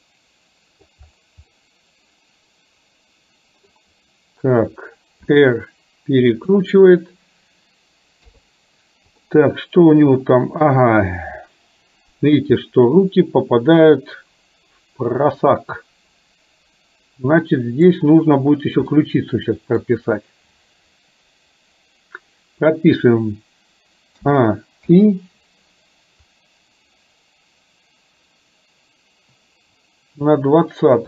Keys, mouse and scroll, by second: 0.0 middle click, 1.6-2.2 scroll up 1, 2.2-3.7 middle drag, 3.7-4.2 scroll down 1, 5.4 r, 8.3 KP_3, 9.3-10.9 middle drag, 12.7-17.8 middle drag, 18.9 middle click, 24.3 a, 24.9 i, 26.4-30.4 drag.